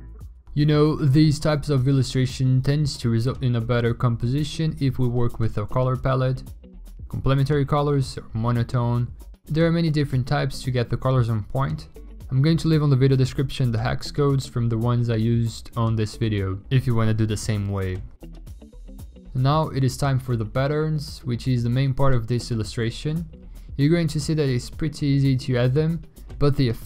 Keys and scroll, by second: 0.4 ctrl+u, 13.7 ctrl+u, 16.1 v, 16.8 ctrl+i, 17.4 ctrl+i, 17.6 ctrl+u.